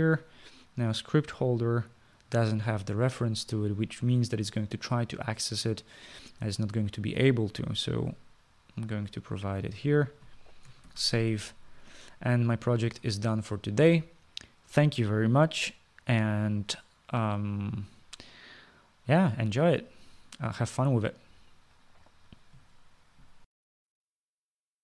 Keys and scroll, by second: 12.1 ctrl+s.